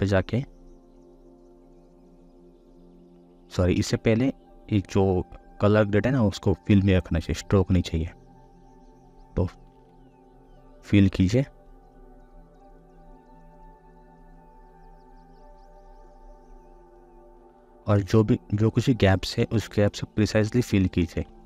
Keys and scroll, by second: 3.6 ctrl+z, 9.6 ctrl+z, 19.3 ctrl+z.